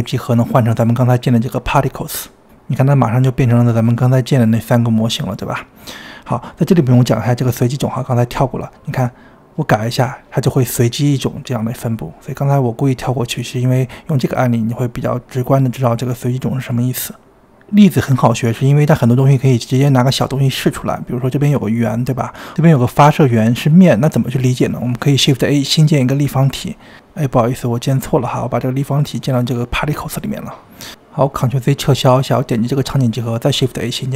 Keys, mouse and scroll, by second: 2.8-3.4 scroll up 2, 3.4-5.3 middle drag, 5.3-6.0 scroll up 1, 6.0 space, 8.2-16.5 drag, 16.5 space, 17.9 space, 19.2-20.6 drag, 20.9-21.5 scroll up 2, 21.5-23.9 drag, 24.9 click, 25.9 click, 26.0 shift+middle click, 26.2 click, 26.4 shift+a, 27.2 g, 29.1 ctrl+z, 29.7 click, 30.6 click, 32.5 click, 33.0 click, 33.5 shift+a.